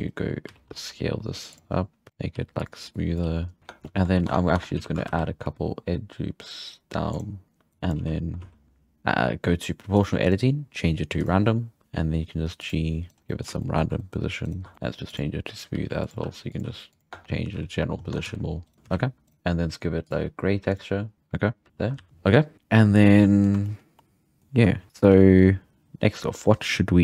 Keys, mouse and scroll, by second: 0.5 s, 2.1 g, 2.3 g, 2.9 click, 3.2 g, 3.6 Tab, 4.3 Tab, 4.6 Tab, 4.8 z, 5.1 ctrl+r, 7.7 shift+middle click, 7.7 1, 7.7 click, 8.0 z, 8.4 z, 8.6-10.0 scroll up 1, 10.0 click, 10.2-11.8 drag, 11.8 g, 13.1 right click, 13.1 scroll up 5, 13.3-14.5 middle drag, 14.5 right click, 14.7 Tab, 14.7-18.8 typing, 15.1-15.7 drag, 17.1 Tab, 17.4-18.0 scroll down 5, 18.0 scroll up 2, 18.7 right click, 18.7 shift+middle drag, 19.3-20.7 right drag, 20.0 click, 20.7-22.0 drag, 22.0 alt+a, 22.1-22.4 scroll up 2, 22.9 scroll down 1, 23.0-23.5 middle drag, 23.5-23.9 scroll down 2, 23.7 shift+middle click, 23.9-25.1 middle drag, 25.1-27.0 scroll up 5.